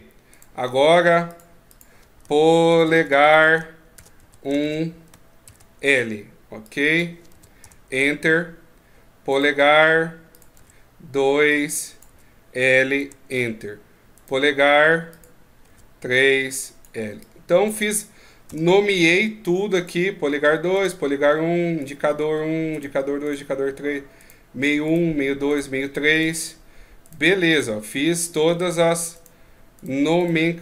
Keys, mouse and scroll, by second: 0.1 right click, 1.0 click, 9.1 right click, 10.1 click, 13.9 right click, 14.9 click, 19.5 right click, 20.5 right click, 21.6 right click, 22.5 right click, 23.0 right click, 23.9 right click, 24.7 right click, 25.3 right click, 25.9 right click, 26.8 right click, 27.3 right click, 27.6 middle click, 28.9 right click, 29.6 right click.